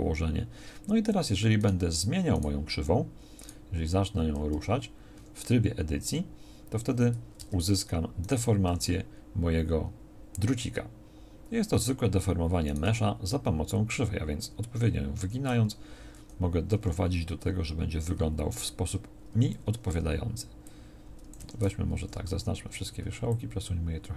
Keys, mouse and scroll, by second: 4.5 g, 7.4 Tab, 8.7 g, 12.9 g, 16.8 g, 21.4 Escape, 22.0 a, 22.1 a.